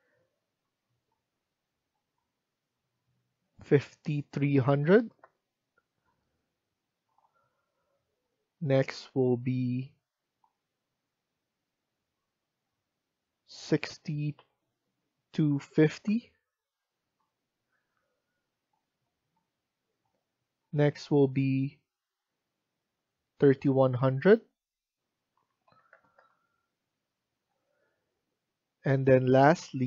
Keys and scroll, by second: 4.1-5.4 typing, 5.9 Return, 14.3-15.9 typing, 17.0 Return, 25.0-26.3 typing, 27.3 Return.